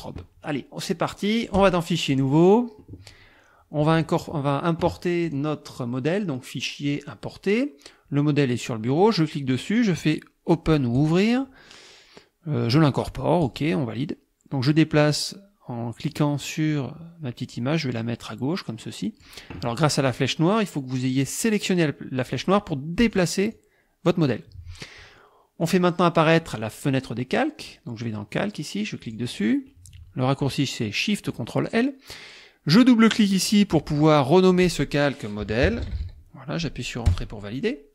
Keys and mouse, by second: 1.6 click, 2.1 click, 5.3 click, 6.9 click, 9.0 click, 11.0 click, 13.4 click, 16.1-19.4 drag, 22.4 click, 23.1 click, 23.6 click, 25.6 click, 29.0 click, 33.0 click, 35.2-36.5 typing, 37.1 Return.